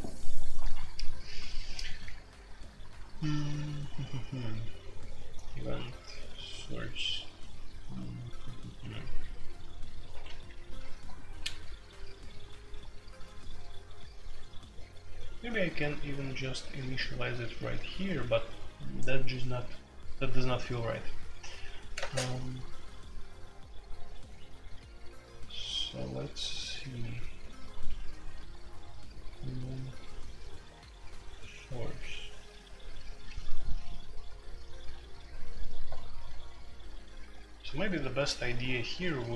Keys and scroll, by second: 10.2 Escape, 21.9 space, 22.0 Tab.